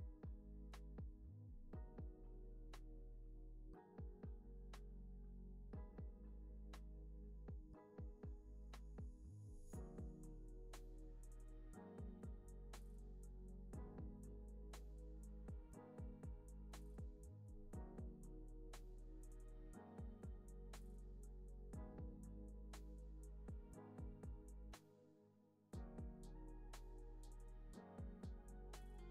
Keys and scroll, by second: 0.0 z, 1.7 super+s, 4.5 super+c, 4.6 super+v, 5.4 x, 7.1 super+c, 7.3 super+v, 7.7 z, 9.1 super+c, 9.4 super+v, 10.0 c, 10.4 super+s, 11.5 space, 20.3 space, 21.5 z, 27.3 z.